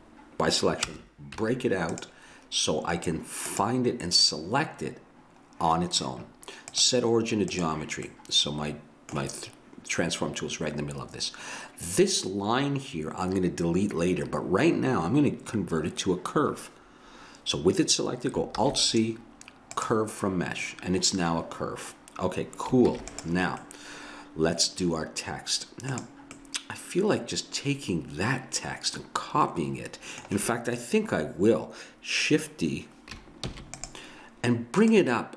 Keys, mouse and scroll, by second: 1.4 Tab, 3.5-5.3 drag, 6.7-8.2 drag, 8.2 middle click, 18.6 alt+c, 22.9 ctrl+s, 23.6 middle click, 26.0-27.3 drag, 27.3 middle click, 33.5 shift+d, 34.9-35.3 drag.